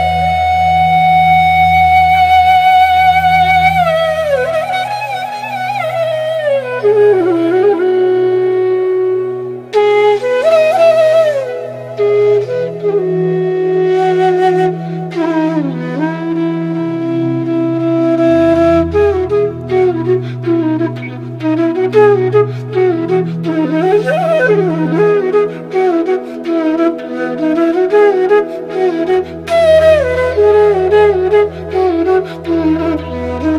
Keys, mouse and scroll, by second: 3.9 click, 9.0 click, 11.6 click, 14.0-15.9 drag, 16.1 click, 17.0 right click, 18.0 click, 21.3-26.2 drag, 26.2-31.9 drag.